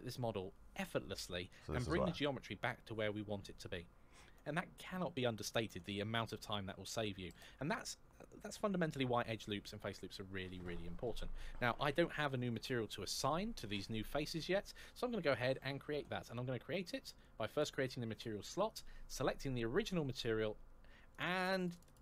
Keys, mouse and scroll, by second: 6.7-7.8 scroll down 1, 10.3 scroll up 1, 17.3 click, 19.5 click, 21.2 click.